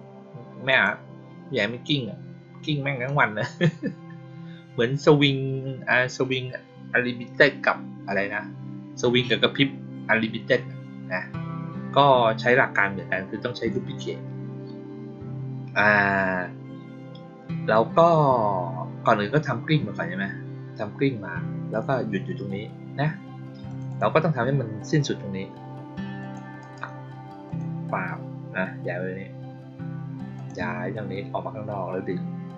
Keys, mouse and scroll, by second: 0.6 click, 23.6 click, 23.8 click, 26.1 click, 26.5 right click, 27.4 click, 30.3 click.